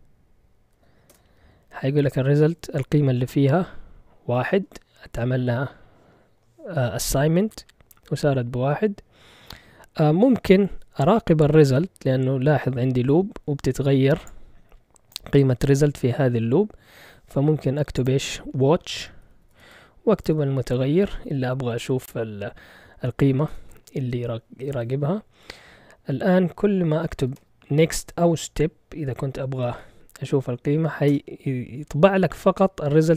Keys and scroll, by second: 0.0-1.1 typing, 18.6-21.8 typing, 23.5 Return, 26.7-27.8 typing, 31.1 Return.